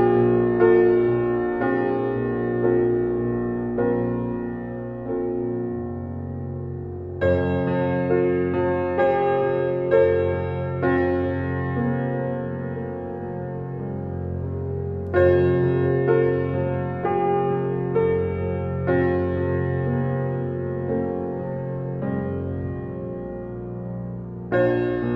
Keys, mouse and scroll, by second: 4.2 ctrl+alt+BackSpace, 4.4 ctrl+alt+scroll up 1, 5.3 space, 5.5 click, 5.9 space, 7.2 ctrl+d, 8.4 click, 8.9 b, 9.9-12.3 alt+right drag, 12.3-15.6 alt+right drag, 15.6 x, 17.0 click, 19.7 x, 20.4 click, 24.5 ctrl+alt+z.